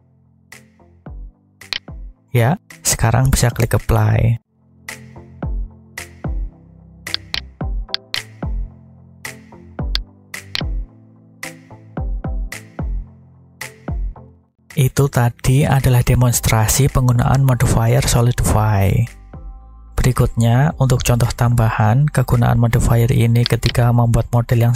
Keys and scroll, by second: 5.5 Tab, 20.3 g, 21.6 y.